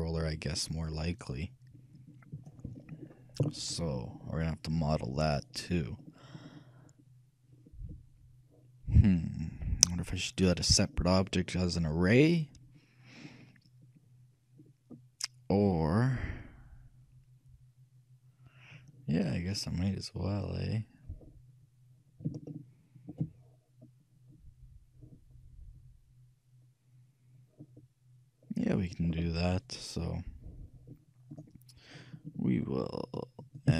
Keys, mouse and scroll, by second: 4.1-7.4 middle drag, 7.7-9.1 middle drag, 9.1-9.6 scroll down 1, 9.6-14.1 middle drag, 14.1-17.0 drag, 20.5-22.3 middle drag, 22.6-25.0 shift+middle drag, 25.7-30.2 middle drag, 31.4-33.7 drag.